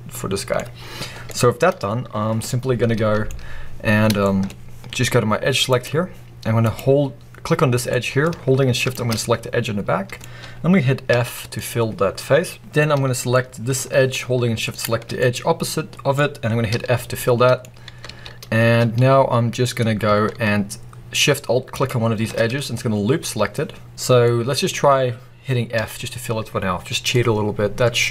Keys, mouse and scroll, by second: 0.0-5.6 middle drag, 0.4-1.2 scroll up 2, 3.2-4.1 scroll up 2, 5.6 click, 6.5 click, 7.8 middle click, 8.7 shift+click, 9.1-11.0 middle drag, 11.0 f, 11.5-12.6 middle drag, 12.6 scroll up 2, 12.7-14.6 middle drag, 14.6 shift+click, 15.0-16.6 middle drag, 16.6 f, 17.0 middle click, 18.0 alt+a, 21.7 alt+shift+click, 23.8-25.6 middle drag, 25.6 f, 27.0-28.1 middle drag.